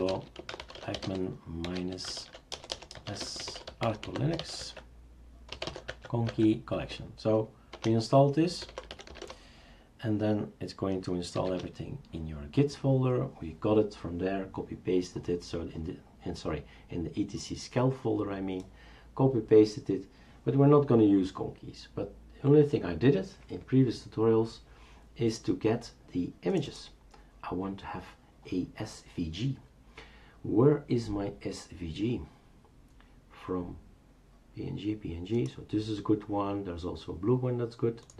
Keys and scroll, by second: 0.0-6.3 typing, 7.7 Return, 8.4-9.6 typing, 11.4 typing, 11.5 Return.